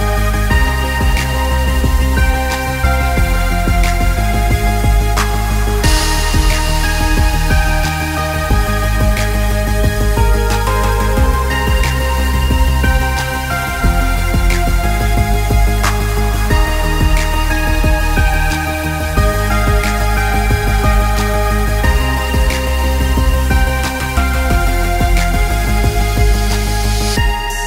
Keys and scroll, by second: 21.5 ctrl+=, 22.2 ctrl+space.